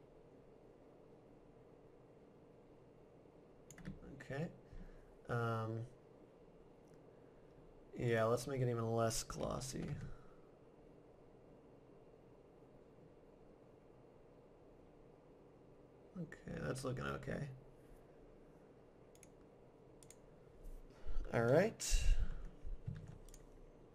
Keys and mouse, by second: 8.1-9.7 drag, 13.9 middle click, 17.4 middle click, 19.2 click, 21.1-23.2 middle drag, 22.9 ctrl+s.